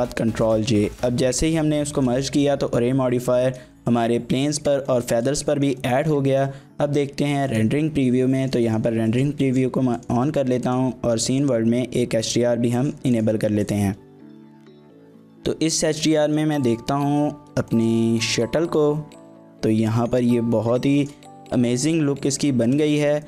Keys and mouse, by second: 0.9-1.4 middle drag, 2.0 shift+middle drag, 2.2 middle drag, 3.4 shift+middle click, 3.8-4.1 middle drag, 4.9 shift+middle click, 5.5 shift+middle click, 5.8 middle click, 6.3 shift+middle click, 7.7-8.0 drag, 8.4 shift+middle click, 8.7 middle drag, 10.0-13.8 drag, 14.3 shift+middle click, 14.6 middle click, 15.1-15.4 middle drag, 15.8 shift+middle drag, 16.1 middle drag, 17.0 middle click, 17.7 shift+middle drag, 18.2 middle click, 19.3 shift+middle click, 21.0 shift+middle click, 23.0 shift+middle click.